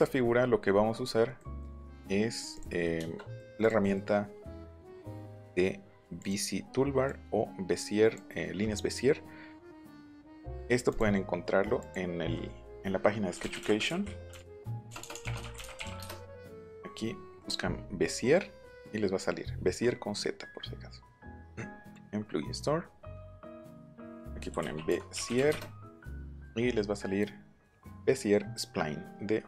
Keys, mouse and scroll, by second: 2.5 click, 3.6 click, 5.2 right click, 6.2 click, 7.0-8.1 drag, 10.2 click, 10.9 click, 11.5 right click, 11.7 click, 13.1-16.2 typing, 13.1 middle click, 21.9 click, 24.1-25.9 typing.